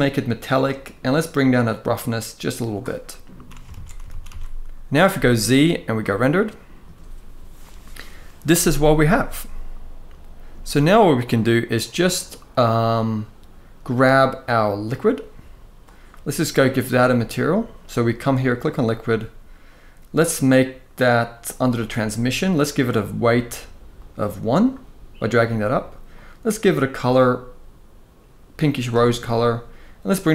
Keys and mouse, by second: 1.0-2.4 drag, 3.4 alt+a, 3.8 ctrl+s, 4.0 ctrl+s, 4.8 z, 10.2 z, 14.6 click, 21.4 click, 23.6-24.2 drag, 25.8 click, 29.8 click.